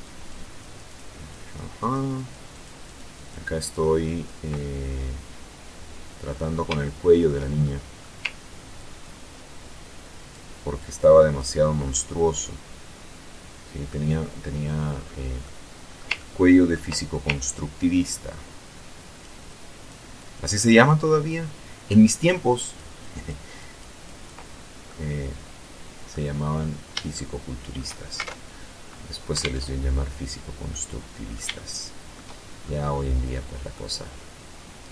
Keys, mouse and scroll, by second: 0.7-1.8 ctrl+drag, 1.9 ctrl+click, 2.2 ctrl+click, 2.9 ctrl+click, 3.4 ctrl+click, 3.9-5.9 ctrl+middle drag, 6.1 shift+middle click, 7.0 shift+middle click, 8.0-9.8 ctrl+drag, 10.1 ctrl+click, 11.1-13.4 ctrl+middle drag, 14.2-14.7 scroll up 1, 14.7-16.2 middle drag, 16.8-18.7 ctrl+drag, 18.8 ctrl+click, 21.8 ctrl+click, 22.4 ctrl+click, 23.7 ctrl+click, 24.2-25.6 drag, 26.4 shift+click, 26.5 shift+middle click, 27.4 alt+shift+Tab, 28.7 alt+Tab, 30.0 click, 30.9 shift+click, 31.3-31.6 shift+scroll up 1, 31.9-32.6 shift+scroll up 5, 32.6-32.9 scroll down 2, 32.9 scroll up 2, 33.1 click, 33.7-34.9 middle drag.